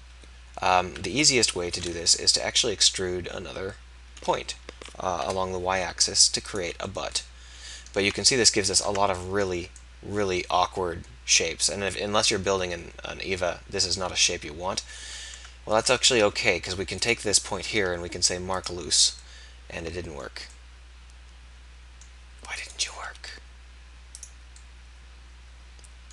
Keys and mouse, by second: 0.1 KP_1, 0.9 KP_3, 2.7 e, 8.0 Tab, 8.8 Tab, 9.4 z, 15.3 Tab, 15.9 Tab, 16.1 z, 23.1 x.